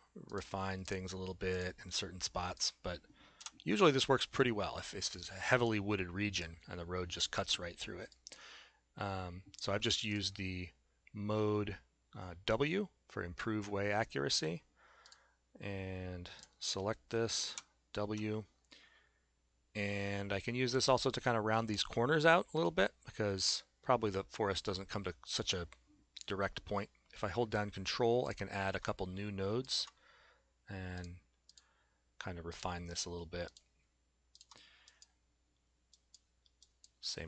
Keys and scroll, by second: 3.4 s, 17.5 w, 18.1 Caps_Lock.